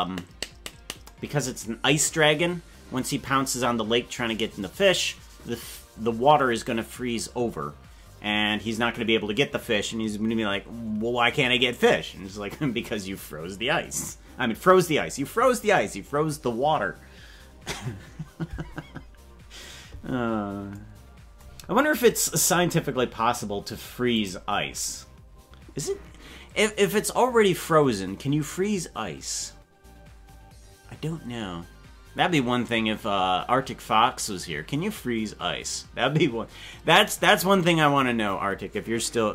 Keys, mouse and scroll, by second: 21.6 scroll down 2, 22.2 scroll down 4, 22.9 scroll down 1, 24.2 click.